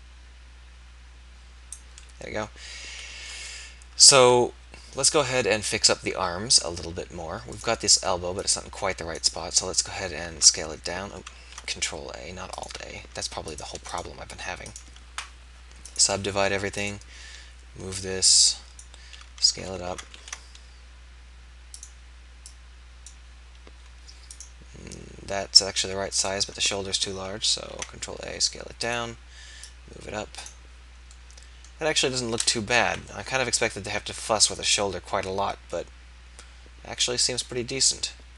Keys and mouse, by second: 2.2-4.5 drag, 4.5 KP_1, 10.4 alt+a, 11.5 ctrl+a, 18.8-20.1 drag, 20.1 ctrl+a, 23.1-24.4 drag, 27.7 ctrl+a, 27.7-28.8 drag, 30.6 click, 31.2-33.2 middle drag, 34.3 middle click.